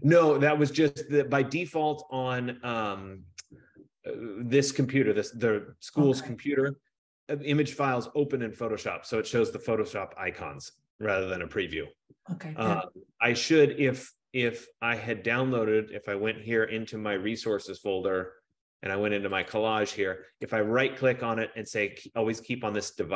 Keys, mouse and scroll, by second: 2.4 click, 14.9 click, 17.7 click, 18.0 click, 19.6 click, 20.8 right click.